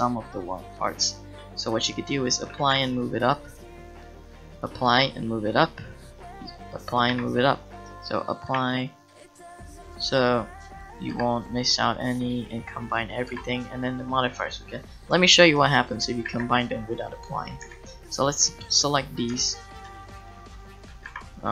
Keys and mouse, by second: 2.6 g, 4.9-9.6 drag, 4.9 g, 7.1 g, 7.8 g, 8.7 g, 11.1 click, 11.1 g, 13.3 g, 13.7 click, 14.6-16.3 middle drag, 16.3 a, 17.6 c, 19.3 b, 20.4 shift+click, 21.1 g.